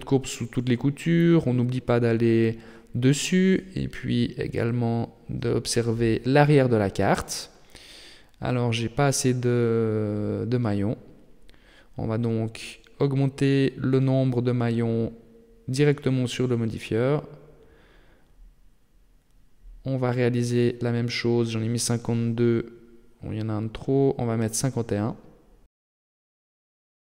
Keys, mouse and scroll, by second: 0.4 shift+middle click, 1.0 KP_7, 1.6-2.0 scroll down 6, 2.0 shift+middle click, 2.7-4.2 scroll up 14, 5.0 scroll down 2, 5.5 middle click, 6.6 shift+middle click, 7.5 middle click, 8.1 shift+middle click, 8.7 right click, 9.1 middle click, 10.5 shift+middle click, 11.5 right click, 12.9 shift+middle click, 13.7-14.6 scroll down 3, 15.5-17.0 click, 15.7 click, 15.8 click, 16.3 click, 16.4 click, 16.7 click, 16.9 click, 19.8 right click, 21.0 click, 23.9 click, 25.2 middle click, 25.7 shift+middle click, 26.3 shift+scroll down 1, 26.5 middle click.